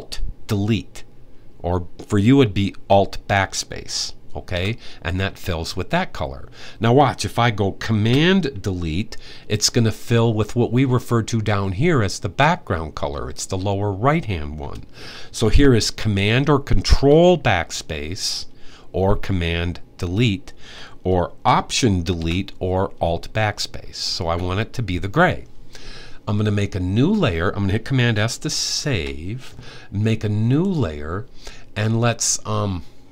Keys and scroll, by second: 28.4 super+s.